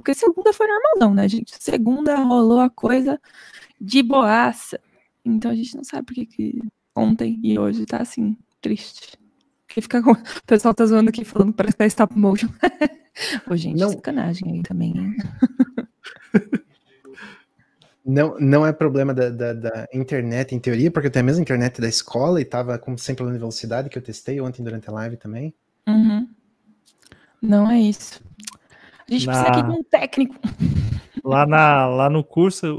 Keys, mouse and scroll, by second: 4.8 scroll down 2, 5.0-32.7 middle drag.